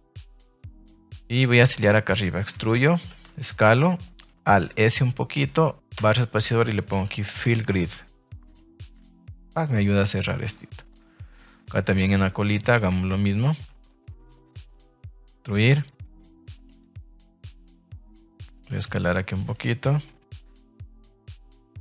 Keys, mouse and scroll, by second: 0.0 middle click, 0.3 shift+middle click, 1.4 alt+right click, 1.7 middle click, 2.5 e, 2.9 Escape, 3.2 s, 4.0 click, 4.4 alt+s, 5.9 space, 7.4 l, 8.9 Tab, 9.6 middle click, 10.5 middle click, 10.8 shift+middle click, 11.1 middle click, 11.4 shift+middle drag, 11.9 middle drag, 12.2 Tab, 12.5 middle click, 13.3 right click, 13.8 middle click, 14.1 middle click, 14.5 middle click, 14.9 e, 16.5 click, 17.4 click, 18.5 click, 18.7 g, 19.3 click, 21.2 click, 21.5 r.